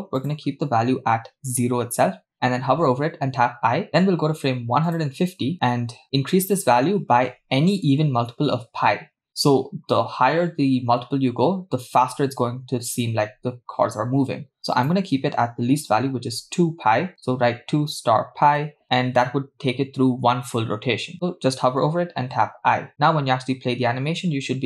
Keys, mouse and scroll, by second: 0.2-1.6 drag, 3.8 i, 5.1 click, 14.7-18.6 drag, 22.5 i, 23.0 space.